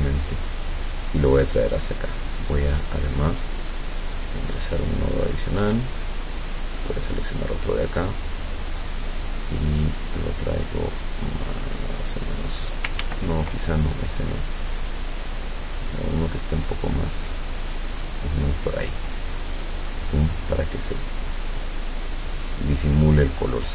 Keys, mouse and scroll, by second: 3.3 click, 3.9-5.6 drag, 6.7 click, 9.1-13.0 drag, 13.1 ctrl+z, 16.4 click, 17.2 click, 18.9-21.8 drag, 22.1 click, 22.9-23.7 drag.